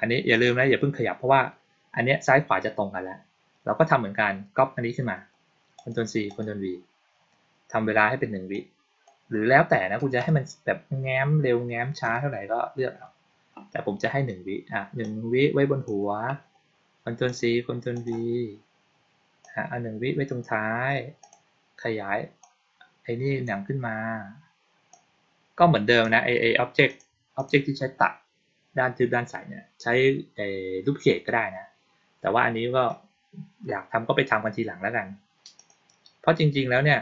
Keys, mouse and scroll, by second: 0.2 click, 5.7 click, 6.2 click, 8.4 click, 14.9-15.8 drag, 17.2 click, 17.9 click, 19.3-20.3 drag, 21.1 click, 22.3-23.4 drag, 24.8-25.9 drag, 26.8 click, 27.3 click, 35.5 click.